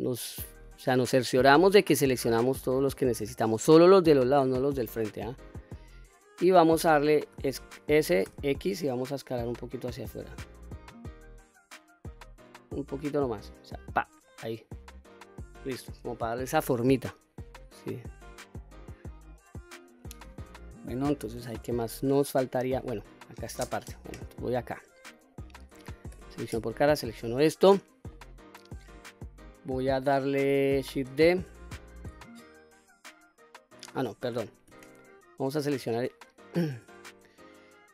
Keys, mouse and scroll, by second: 0.5 shift+click, 1.2 shift+click, 2.2 shift+click, 2.8 shift+click, 3.4 shift+click, 4.0 shift+click, 4.6-6.5 middle drag, 7.3 s, 8.3 x, 13.9 click, 14.3-15.6 middle drag, 15.9-16.7 scroll down 1, 16.7-19.9 middle drag, 21.7-22.8 middle drag, 23.1-24.7 scroll up 1, 24.7 middle click, 26.1 3, 26.5 click, 27.1-28.1 middle drag, 28.8-29.8 middle drag, 31.1 shift+d, 33.2 right click, 34.3 ctrl+z, 34.7 ctrl+z, 35.5 click, 37.0-37.9 middle drag.